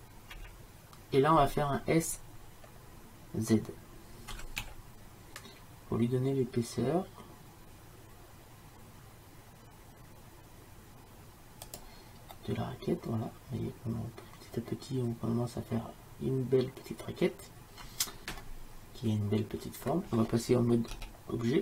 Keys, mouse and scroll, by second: 0.4 KP_1, 4.4 s, 12.4-14.4 middle drag, 21.0 Tab.